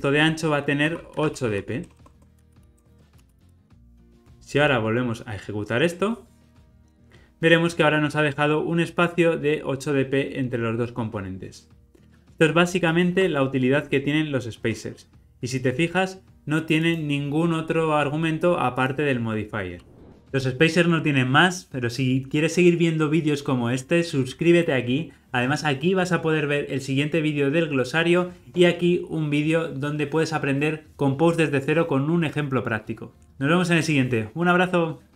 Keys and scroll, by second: 13.2 super+b.